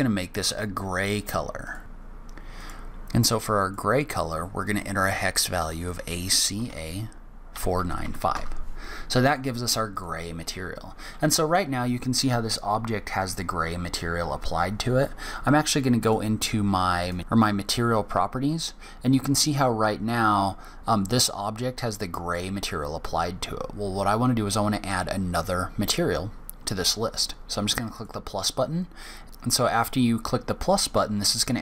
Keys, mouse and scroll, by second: 2.3 click, 9.7 click, 15.8 click, 16.7 click, 27.7 click.